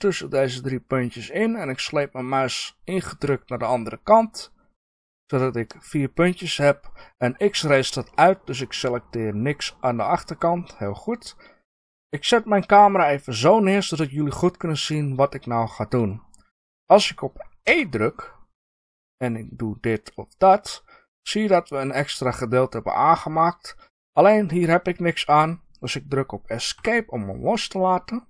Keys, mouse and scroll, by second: 0.0-1.6 drag, 8.0 middle click, 8.7 scroll down 2, 9.7-13.2 middle drag, 13.2 scroll down 1, 26.7 Escape.